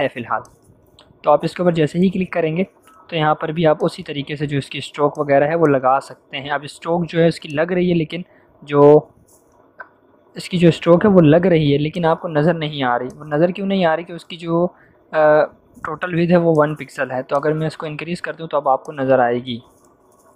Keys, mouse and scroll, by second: 0.4 click, 3.7 click, 10.3 click, 16.5-17.9 drag.